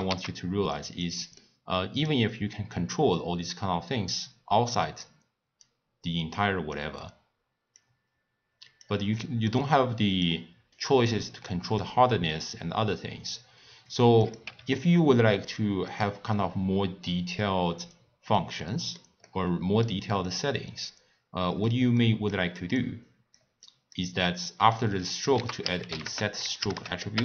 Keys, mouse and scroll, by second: 1.0 click, 1.4-2.7 middle drag, 2.7-5.7 drag, 6.3 click, 7.7-9.1 drag, 9.1-10.2 middle drag, 10.2 click, 11.0 scroll up 2, 11.7-14.8 drag, 18.6-20.2 middle drag, 20.2 click, 21.9 middle click, 22.7 click, 23.6 click, 24.2 click, 25.3 ctrl+a.